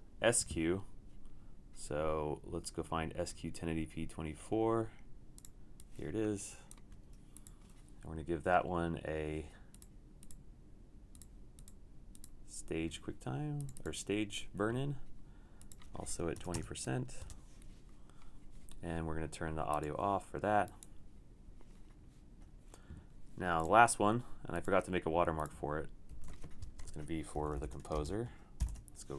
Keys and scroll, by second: 16.2-16.9 typing, 17.2 Return, 20.2-20.9 typing, 26.2 super+d, 26.9 Return, 27.1-28.0 typing, 28.7 super+o.